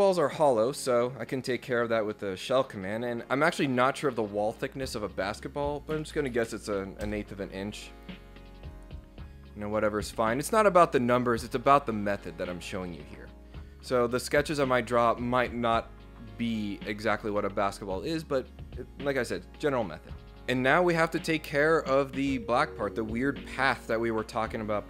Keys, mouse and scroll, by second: 0.0 scroll up 2, 0.2 scroll down 2, 0.4 scroll up 2, 2.2 click, 7.1 Return, 8.6 click.